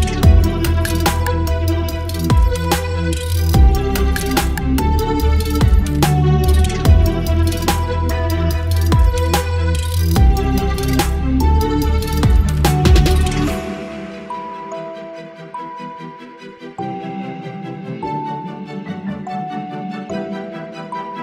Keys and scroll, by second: 2.9 Delete, 7.6 v, 9.4 ctrl+BackSpace, 10.5 Delete, 11.9 Delete, 12.4 v, 13.2 ctrl+e, 14.6 ctrl+e, 15.6 space, 15.9 l, 21.0 ctrl+BackSpace.